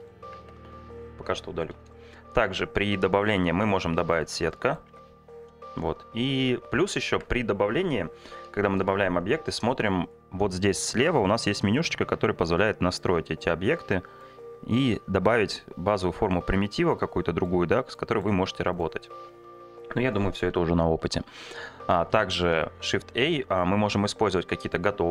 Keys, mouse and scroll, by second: 0.4 Tab, 1.2 Delete, 2.3 shift+a, 4.5 middle click, 4.9 Tab, 7.1 Tab, 7.8 Delete, 8.7 shift+a, 11.3 click, 13.2-14.3 drag, 14.8-17.5 drag, 18.8 click, 19.8 Delete, 22.4 shift+a.